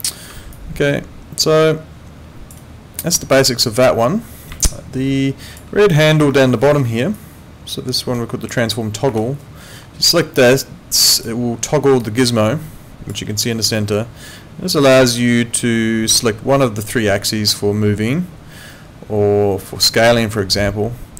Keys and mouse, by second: 0.5 alt+click, 2.6 alt+right click, 3.3 alt+click, 4.6 alt+click, 6.6 ctrl+2, 9.1 Escape, 11.1 click, 12.0 alt+click.